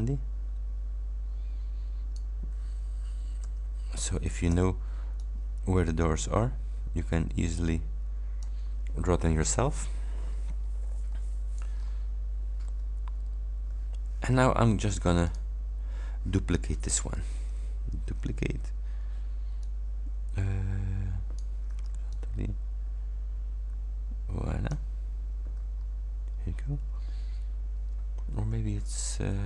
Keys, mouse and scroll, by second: 3.5 h, 4.6 v, 5.3-8.7 drag, 10.1-10.5 scroll up 1, 10.7-11.9 scroll up 4, 11.9 scroll down 2, 13.0 alt+scroll down 2, 14.7-15.0 ctrl+scroll down 2, 15.3 ctrl+click, 18.0 ctrl+d, 19.7-21.7 drag, 21.7 h, 22.2-24.9 drag, 25.9 ctrl+scroll down 2.